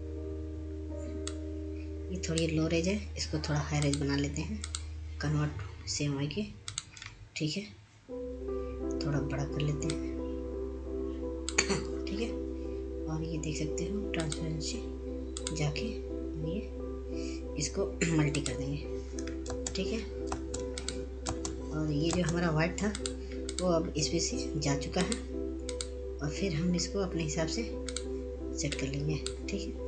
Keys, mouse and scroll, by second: 4.2-7.0 drag, 9.7 click, 12.1 click, 12.8-16.5 ctrl+drag, 17.2 click, 21.3 click, 22.5 ctrl+space, 23.6 click, 24.2 ctrl+space, 25.7 click, 29.7-29.8 scroll down 1.